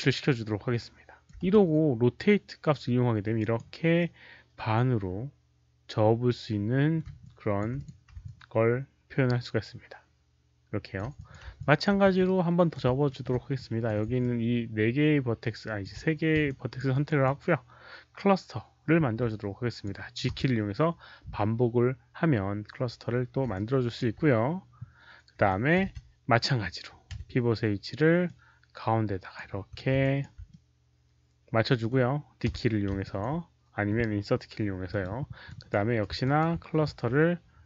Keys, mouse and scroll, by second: 0.9-3.1 typing, 1.2 middle click, 2.6 alt+click, 2.6 middle click, 3.9-6.9 middle drag, 4.5-5.3 typing, 7.1 alt+click, 7.7 alt+click, 8.2-10.9 alt+drag, 11.1 alt+click, 11.1 middle click, 11.1-12.5 typing, 11.5 alt+click, 12.0 middle click, 12.2 right click, 13.0 alt+middle click, 13.5 alt+click, 14.1-15.7 alt+drag, 16.4 alt+click, 16.8 alt+right click, 17.1-19.8 alt+drag, 19.5-20.8 typing, 19.8 alt+right click, 19.8 alt+middle click, 20.3 alt+right click, 20.3 alt+middle click, 23.4 alt+click, 25.4 alt+click, 25.8 w, 26.9-27.6 typing, 27.1 alt+click, 27.1 alt+right click, 28.2-29.3 alt+drag, 29.5 4, 29.9 alt+click, 30.4-31.8 middle drag, 32.4 d, 32.9 alt+click, 34.8 alt+click, 35.4-37.6 typing, 35.4 click, 35.6 middle click, 36.1 middle click, 36.1 ctrl+click, 37.4 middle click.